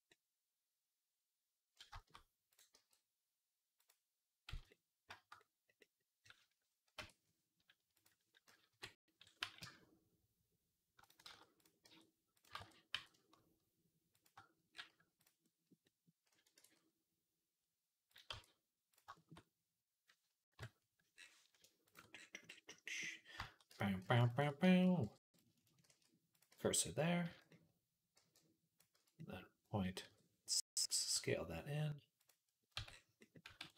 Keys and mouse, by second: 0.1-2.4 middle drag, 2.4 click, 2.6-5.6 middle drag, 2.6 g, 4.3 z, 6.8 Tab, 7.8 click, 8.5 KP_3, 9.2 g, 11.1 ctrl+z, 11.7 g, 12.4 ctrl+z, 12.8 g, 15.3 click, 16.4 ctrl+s, 18.1 Tab, 20.4 KP_Decimal, 22.3-27.3 middle drag, 23.5-28.8 typing, 29.0 middle click, 30.7 middle click, 31.0 s, 32.3-33.5 middle drag, 32.6 Tab, 33.5 ctrl+s.